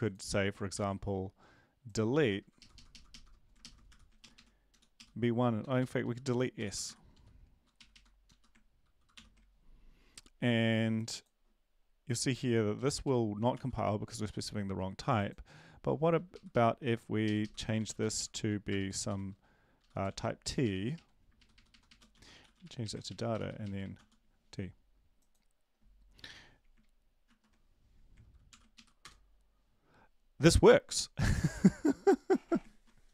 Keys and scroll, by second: 0.7 ctrl+c, 2.6 ctrl+shift+Left, 2.7 ctrl+shift+Left, 2.9 ctrl+shift+Left, 3.9 ctrl+shift+Left, 3.9 ctrl+v, 4.2 Up, 4.3 Up, 4.7 Down, 4.9 Up, 5.6 Down, 5.8 Down, 6.2 Right, 6.6 Delete, 6.8 Delete, 7.8 Right, 9.2 ctrl+/, 12.8 Down, 13.0 ctrl+/, 13.5 ctrl+s, 18.1 Left, 18.1 ,, 18.1 >, 18.7 BackSpace, 19.1 t, 20.6 Left, 20.6 Right, 20.6 <, 20.9 Right, 21.5 shift+Right, 21.7 shift+Right, 21.9-24.4 typing, 28.5 ctrl+l, 28.7 Up, 29.0 Return, 32.7 ctrl+`.